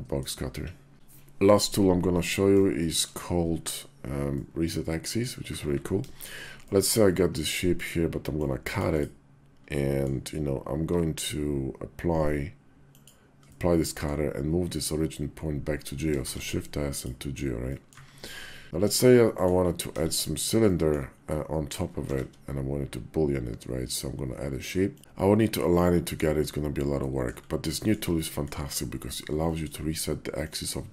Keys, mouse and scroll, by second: 1.2 KP_5, 2.1 middle click, 2.5 shift+middle drag, 4.2-5.0 middle drag, 5.3 `, 5.8 KP_5, 6.5 shift+middle click, 8.1 middle click, 9.5-9.9 drag, 10.4 q, 13.3 click, 16.0 shift+s, 17.5 drag, 17.9 `, 18.6-19.3 drag, 19.7 KP_5, 20.5 middle click, 21.9 shift+a, 26.8-27.1 middle drag, 27.5 shift+click, 27.9-28.3 drag, 29.3 shift+click, 30.8 g.